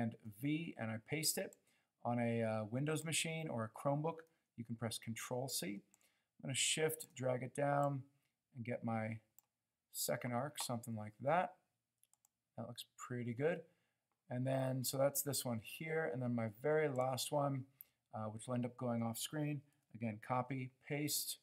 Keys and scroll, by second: 0.0 super+v, 19.9 super+c, 20.3 super+v.